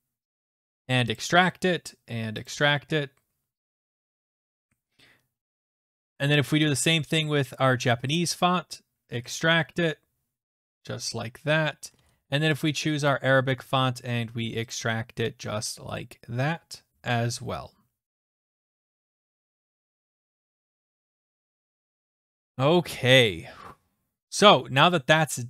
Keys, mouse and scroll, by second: 1.2 click, 2.6 click, 5.9 alt+Tab, 6.7 click, 7.0 right click, 8.2 click, 9.4 click, 12.0 alt+Tab, 12.6 click, 13.1 right click, 14.7 click, 16.1 click, 22.3 click, 24.8 click.